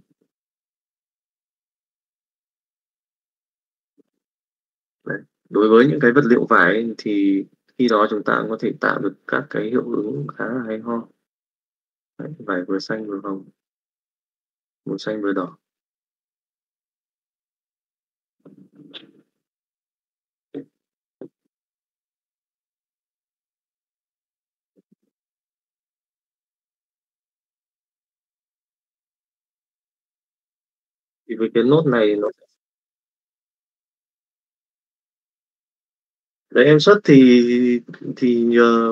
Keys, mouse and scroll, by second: 0.9 Tab, 1.5 middle click, 2.3 click, 2.8 click, 4.1 click, 5.0 middle click, 5.7 middle click, 6.6 click, 8.9 click, 16.2 click, 22.3 middle click, 23.1-24.4 middle drag, 24.9 middle click, 25.6-26.6 middle drag, 28.3 click, 32.3-33.7 drag.